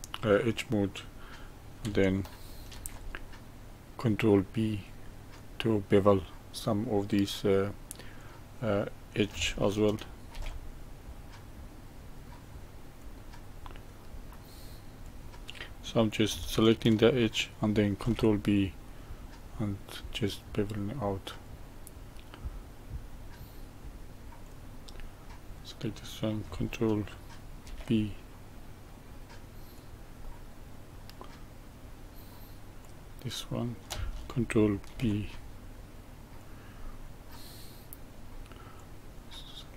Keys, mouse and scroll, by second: 2.7 ctrl+b, 8.1 click, 10.3 ctrl+b, 13.5-15.0 middle drag, 15.0 click, 17.9 ctrl+b, 20.7-23.7 middle drag, 24.4 click, 24.9-27.6 middle drag, 27.6 ctrl+b, 30.2-32.8 middle drag, 32.8 click, 34.9 ctrl+b, 36.8-38.7 middle drag, 38.7 click.